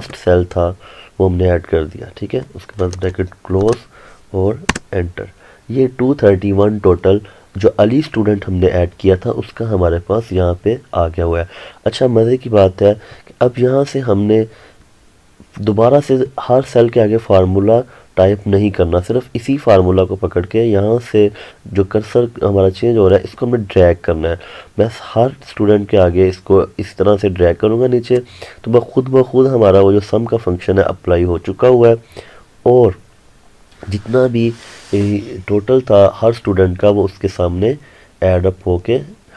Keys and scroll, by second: 4.8 Return.